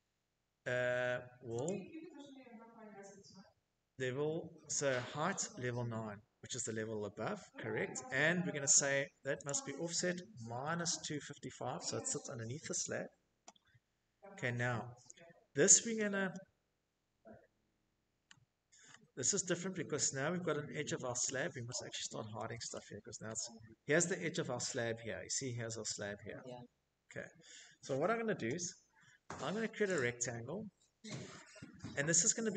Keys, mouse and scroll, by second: 2.8 click, 7.0 click, 7.9-9.4 typing, 14.3 scroll, 15.7-16.6 scroll, 17.4-17.9 scroll, 19.2-19.7 scroll, 20.3-21.3 scroll, 22.9 middle click, 23.9 middle click, 24.1 middle click, 24.4 middle click, 24.6 middle click, 27.5 click, 30.5 click, 31.9 click.